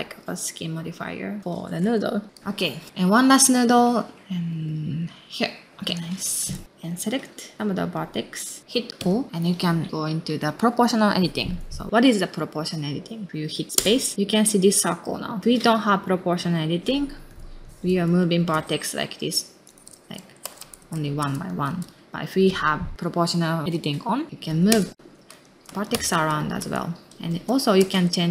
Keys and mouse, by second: 0.9 middle click, 1.4 s, 2.5 middle click, 2.9 shift+space, 3.1 shift+d, 4.2 space, 4.5 r, 5.1 space, 5.4 middle click, 5.5 space, 5.8 click, 6.5 middle click, 7.4-8.4 drag, 8.4 middle click, 8.9 o, 13.7 space, 17.6 click, 18.5 space, 20.8 ctrl+z, 21.0 click, 21.2 space, 21.7 ctrl+z, 21.8 click, 22.0 o, 22.4 click, 24.7 space, 25.4 ctrl+z, 25.5 click, 25.6 space, 26.1 ctrl+z, 26.4 click, 27.2 space, 27.3 ctrl+z, 27.5 click, 27.8 space.